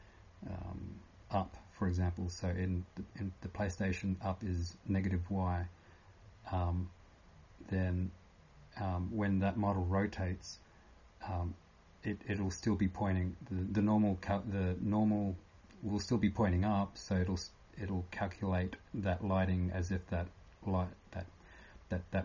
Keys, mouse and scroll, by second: 0.0-22.2 typing.